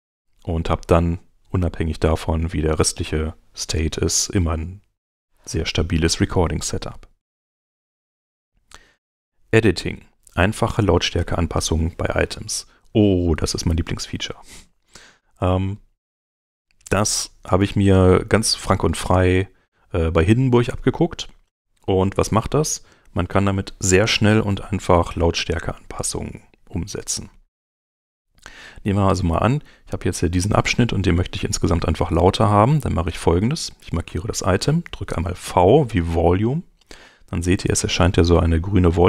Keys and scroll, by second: 4.1 super+Tab, 13.3 super+Tab, 35.4 v.